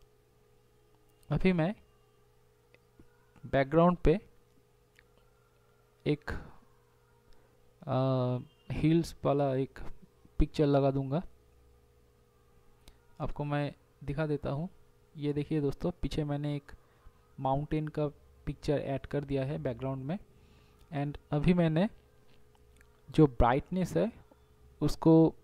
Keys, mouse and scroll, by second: 12.1 ], 13.6 space, 20.7 [, 22.3 [, 23.3 ].